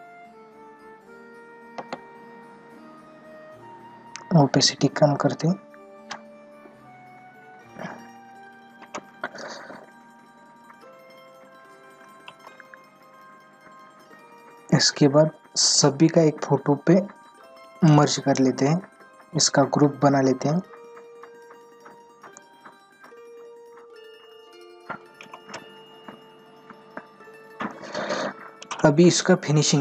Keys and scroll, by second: 1.8 ctrl+alt+z.